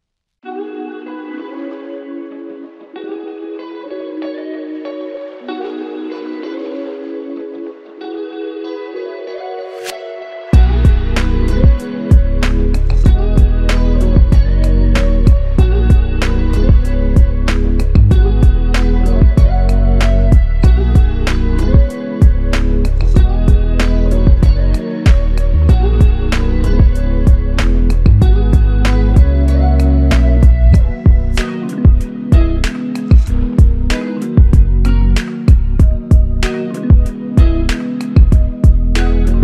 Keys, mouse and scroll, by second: 3.6 alt+click, 3.8 ctrl+click, 7.6 ctrl+click, 11.7 ctrl+click, 19.8 ctrl+click, 22.1 ctrl+click, 32.9 ctrl+click.